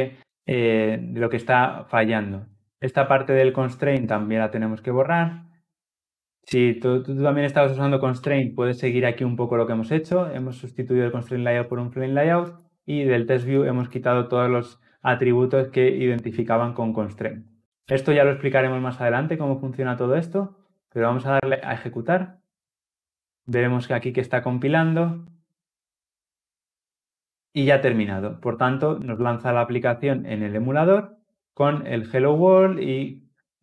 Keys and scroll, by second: 8.0 ctrl+alt+l, 8.2 ctrl+alt+o, 20.8 shift+F10.